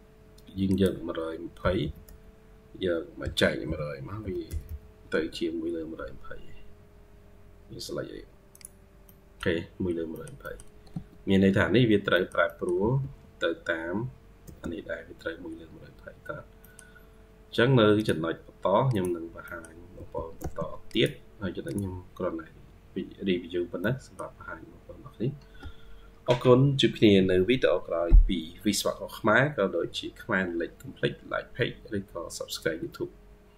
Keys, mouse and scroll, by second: 1.7 typing, 3.5-5.0 typing, 6.8-7.8 scroll down 1, 8.9 middle click, 9.7 scroll down 2, 10.0 middle click, 10.3 middle click, 10.8 Escape, 11.0-12.0 scroll up 4, 12.0 middle click, 12.3 middle click, 12.6 typing, 14.9 scroll, 14.9 scroll up 1, 15.1-15.7 scroll down 2, 15.1-16.5 typing, 15.7 scroll up 1, 16.2 scroll down 2, 16.5 middle click, 19.3 middle click, 19.8 typing, 22.4-23.0 scroll up 2, 22.4-23.5 typing, 23.5 scroll down 1, 23.7 middle click, 25.1-26.1 scroll down 1.